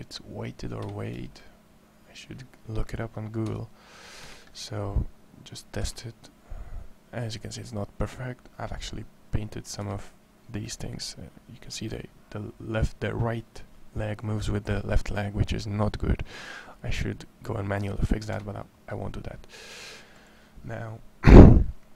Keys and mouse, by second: 1.2 drag, 3.3 r, 5.6 r, 11.5 r.